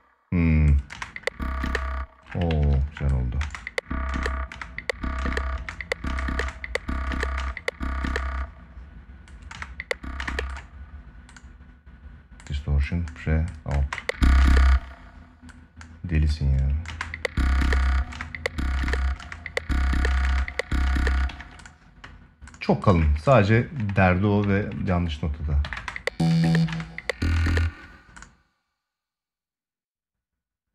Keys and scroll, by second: 0.7 space, 2.2 ctrl+s, 3.1 space, 9.2 space, 13.5 space, 16.6 space, 21.0 ctrl+s, 25.3 ctrl+Up.